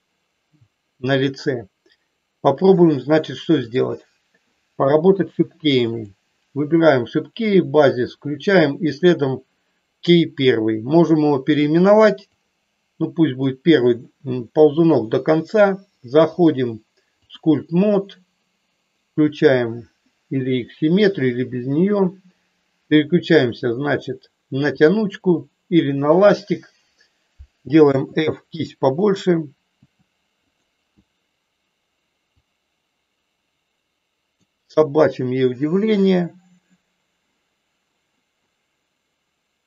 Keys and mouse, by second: 5.8 click, 7.8 click, 8.8 click, 12.3-13.4 drag, 16.4-17.7 drag, 29.7 f, 32.4-34.3 drag.